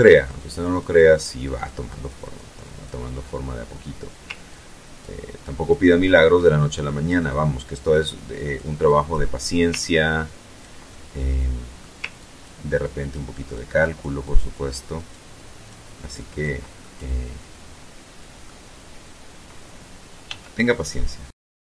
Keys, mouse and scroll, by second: 4.1 ctrl+click, 4.5 ctrl+click, 5.3 ctrl+click, 5.9-7.3 ctrl+drag, 7.5 ctrl+click, 8.0 ctrl+click, 8.9-9.9 ctrl+drag, 10.0-11.1 ctrl+drag, 11.3 ctrl+click, 12.0 ctrl+click, 12.9 ctrl+click, 13.5-14.5 ctrl+drag, 15.3 ctrl+click, 15.9-18.1 ctrl+middle drag, 19.3 f, 20.3 click, 20.9 ctrl+click, 21.4 ctrl+click.